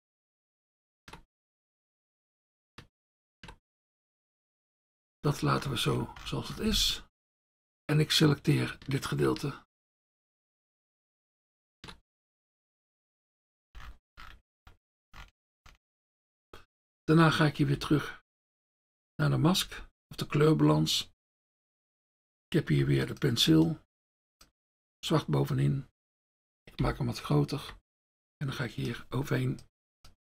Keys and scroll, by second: 22.8 F1, 26.8 ].